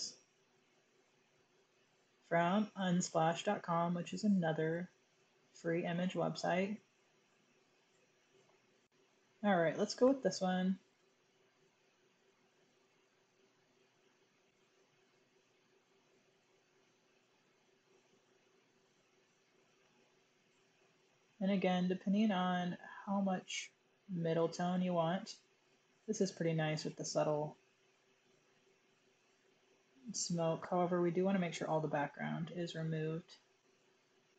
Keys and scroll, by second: 10.8 super+j.